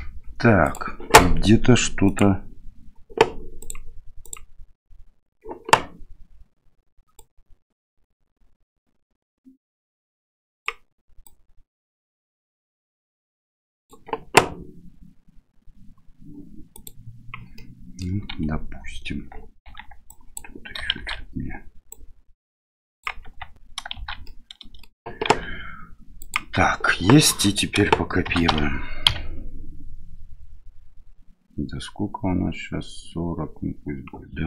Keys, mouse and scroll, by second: 0.7-17.4 drag, 17.6 middle click, 18.4 Tab, 19.2 Tab, 19.7 Tab, 20.2 click, 21.0 shift+z, 21.1 shift+x, 21.9-23.0 drag, 23.2 Tab, 24.0 shift+z, 24.2-24.8 middle drag, 25.3 q, 28.3 shift+d.